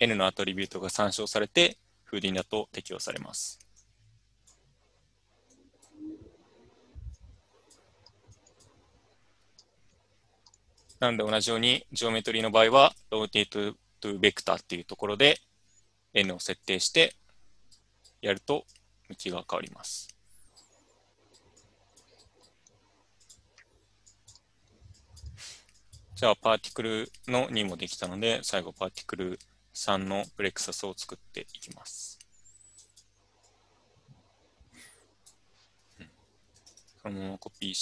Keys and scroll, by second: 36.5 ctrl+c, 36.7 ctrl+v.